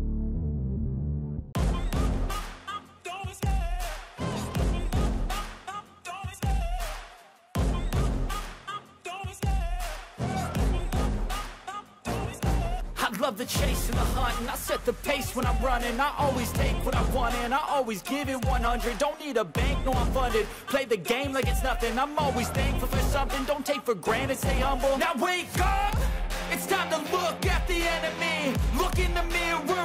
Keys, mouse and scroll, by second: 2.1 ctrl+i, 3.6 Delete, 14.9 ctrl+j, 16.5 right click, 20.4 ctrl+-, 20.7 ctrl+-, 20.7 ctrl+-, 22.3 ctrl+=, 22.7 ctrl+t.